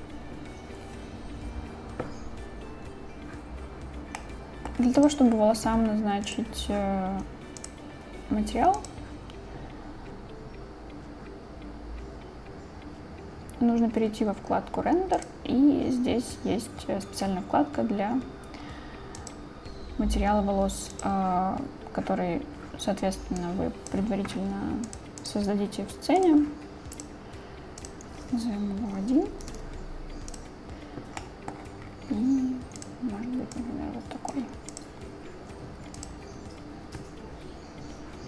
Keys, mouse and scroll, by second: 4.3 middle click, 5.4 click, 7.4 click, 15.3 click, 19.3 click, 23.5-24.3 drag, 25.6 click, 27.1 click, 28.5-30.4 drag, 31.7 middle click, 36.0 click.